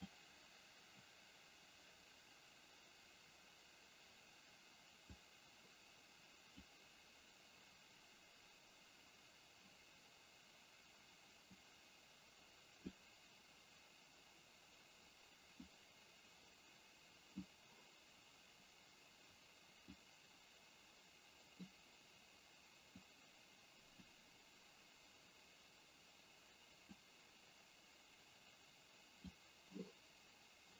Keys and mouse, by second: 5.3-6.8 drag, 11.6-12.9 drag, 15.8-17.7 drag, 20.0-21.7 drag, 23.0-24.2 drag, 27.0-29.2 drag.